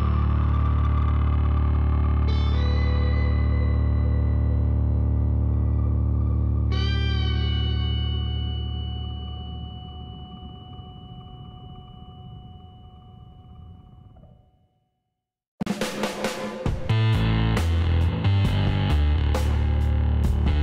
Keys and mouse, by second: 0.4 g, 2.2-4.1 middle drag, 2.4 a, 4.3 Tab, 6.4 a, 6.6-9.5 middle drag, 10.2-14.3 drag, 13.4 Tab, 14.3 middle click, 14.7-16.5 drag, 15.5 w.